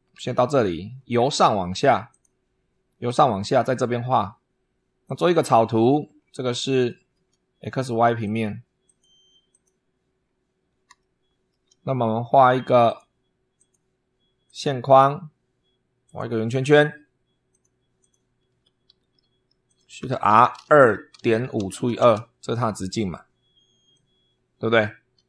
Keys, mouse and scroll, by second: 1.9 click, 4.9 click, 5.7-6.2 scroll down 2, 6.7 shift+click, 8.0 click, 8.7 click, 9.3 click, 10.0-10.5 scroll up 2, 10.8 shift+middle click, 12.7 click, 13.4 click, 14.3 click, 15.9 click, 17.3 click, 17.8 click, 18.3 Escape, 19.5 click, 19.9-22.0 typing, 23.7 click.